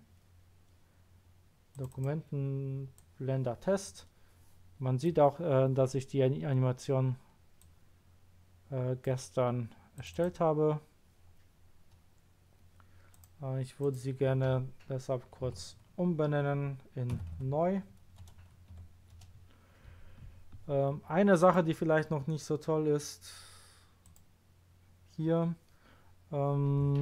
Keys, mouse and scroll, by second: 1.7 click, 1.9 click, 2.9 click, 7.6 drag, 9.9 click, 13.1 click, 13.8 click, 15.5 Right, 17.1 n, 17.3 w, 18.2 BackSpace, 18.7 u, 19.1 Return, 21.4 click, 24.0 click.